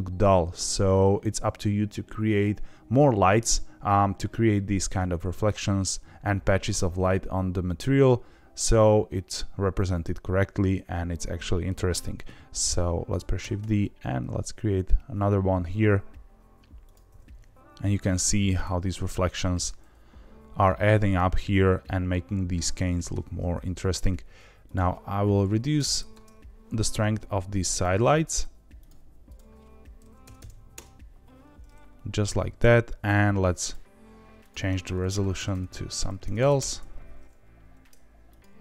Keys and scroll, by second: 13.1 shift+d, 13.3 r, 13.5 z, 17.0 g, 17.1 z, 17.3 z, 25.8 KP_0, 30.3 KP_0, 35.4 KP_0, 36.3 KP_0.